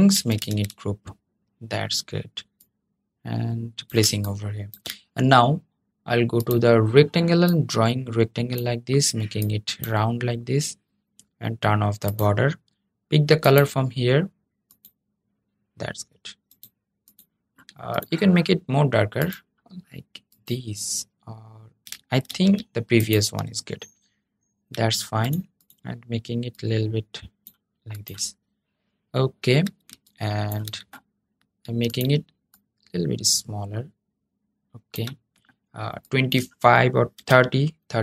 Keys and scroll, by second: 21.9 super+z.